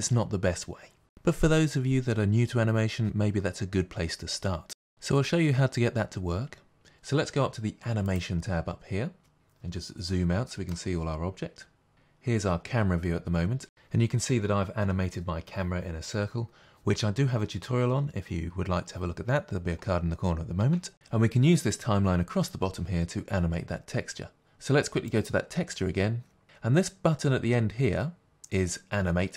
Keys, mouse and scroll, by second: 9.6-10.7 scroll down 2, 10.7-15.7 middle drag, 15.7-29.3 drag.